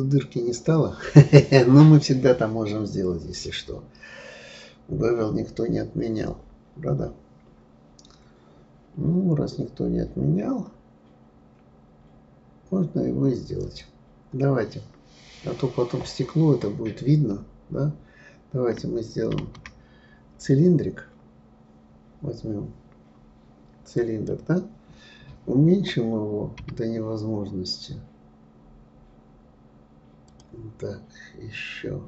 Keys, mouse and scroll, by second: 2.7-5.5 scroll down 7, 5.5-6.6 scroll down 2, 7.2-8.2 scroll up 4, 13.6 click, 19.4 shift+a, 24.2 click, 26.6 s.